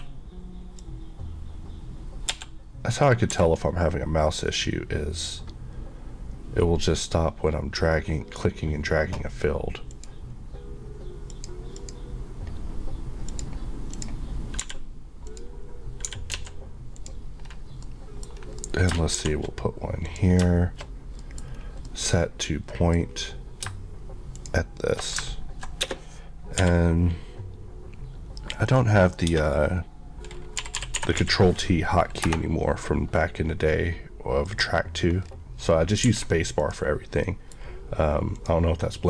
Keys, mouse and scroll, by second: 0.0 q, 0.8 click, 2.3 Escape, 3.4 q, 4.6 click, 14.6 g, 15.3 click, 16.1 g, 16.4 z, 17.0 click, 17.5 scroll down 1, 17.9 middle click, 18.4 scroll down 1, 18.7 middle click, 19.2 shift+d, 20.1 click, 20.5 shift+Left, 20.9 click, 21.3 middle click, 21.5 scroll up 1, 21.9 middle click, 22.1 scroll up 1, 22.8 middle click, 23.1 scroll up 1, 24.4 click, 25.8 space, 26.6 Escape, 28.7 click, 29.4 space, 30.6-31.3 typing, 32.3 Return, 34.5 click, 35.2 scroll up 1, 35.3 scroll, 35.6 scroll down 1, 36.1 alt+a, 36.7 click, 37.3 middle click, 38.4 click.